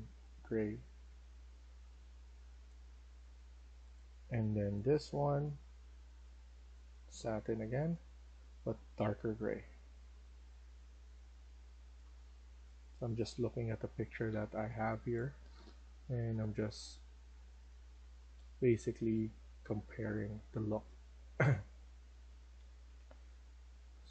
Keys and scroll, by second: 12.8-13.6 typing, 15.2-24.1 typing.